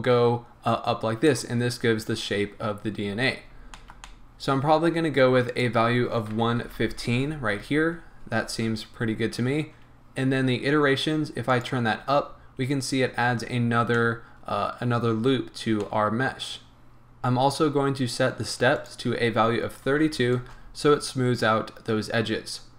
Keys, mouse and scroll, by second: 1.6 scroll down 1, 3.3-3.7 scroll up 1, 3.7-5.6 shift+middle drag, 5.6-11.8 drag, 6.6 KP_1, 7.2 Return, 8.4 scroll down 1, 8.9 scroll up 1, 12.1 scroll down 1, 13.6 scroll up 1, 14.0-17.0 middle drag, 15.6 scroll up 1, 17.0 right click, 18.8-22.7 drag, 20.5 Return.